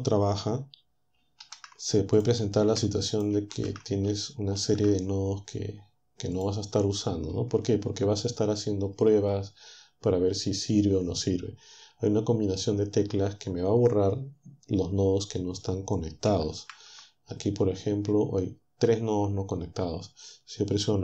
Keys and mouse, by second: 1.4 shift+d, 2.6 shift+d, 3.5 d, 4.6 shift+d, 16.6 ctrl+Up.